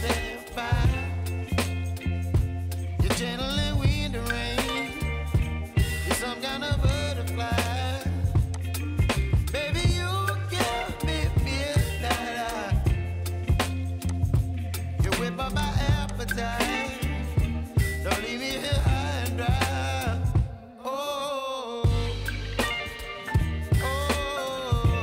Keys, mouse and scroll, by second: 1.8-2.8 scroll down 1, 4.3-5.0 scroll down 6, 5.5-6.2 scroll down 2, 6.9-15.0 drag, 21.0-21.9 scroll up 9, 21.9-23.0 middle drag, 23.0-23.9 scroll down 9, 23.9-24.8 scroll up 6, 24.8-25.0 scroll down 1.